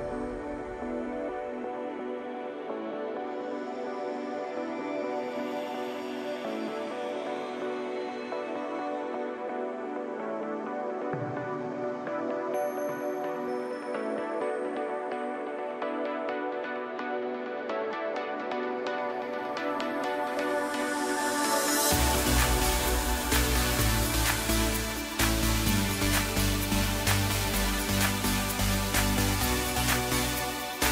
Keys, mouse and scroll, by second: 1.0 KP_1, 1.8 scroll up 1, 2.9 g, 5.5 scroll down 1, 5.7-7.2 middle drag, 7.2 scroll down 4, 8.8 KP_1, 10.3-13.4 drag, 15.6-18.4 drag, 18.4 KP_Divide, 19.3 KP_7, 20.2-21.2 scroll down 1, 21.2 Tab.